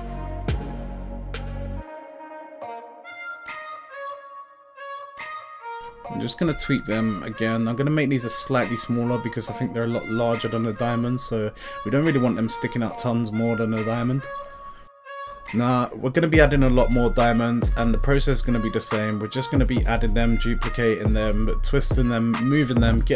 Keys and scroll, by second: 8.4 s, 8.8 y.